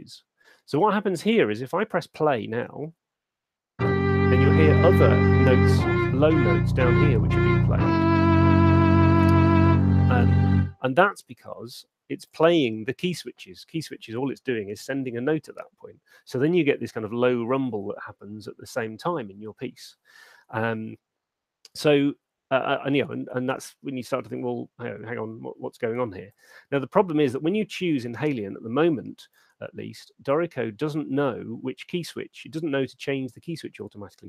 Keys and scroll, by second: 2.7 alt+shift+space, 10.5 space.